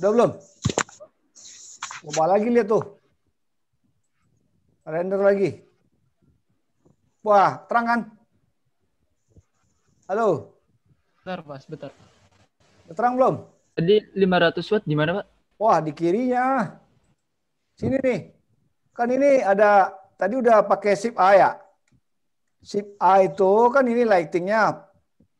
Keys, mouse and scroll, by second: 20.7 click.